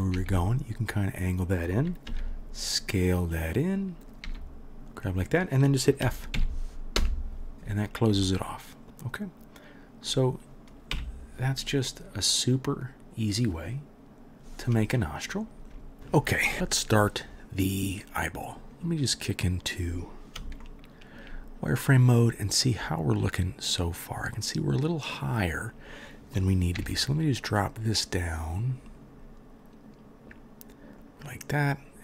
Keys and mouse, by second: 0.2 g, 0.3-8.2 drag, 2.1 s, 4.2 g, 6.4 f, 7.0 Return, 8.2-9.8 middle drag, 9.4 drag, 9.8 click, 10.0 middle click, 10.9-14.0 drag, 10.9 KP_1, 14.0-18.7 middle drag, 18.7 click, 18.8-23.3 middle drag, 23.3-31.1 drag, 26.8 g, 31.1-31.6 middle drag, 31.6-32.0 drag.